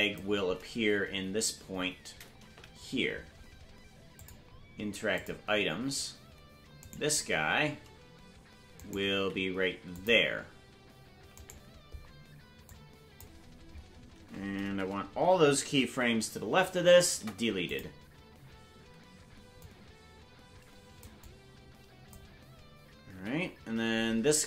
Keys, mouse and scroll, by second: 2.5 Right, 4.1 click, 5.4 click, 6.9 right click, 9.1 right click, 9.1 g, 11.3-12.7 right drag, 12.7 click, 13.7-15.9 scroll down 1, 15.9-16.4 scroll down 5, 15.9 [, 17.1 Delete, 19.6-21.0 drag, 21.2 click, 23.1 Left.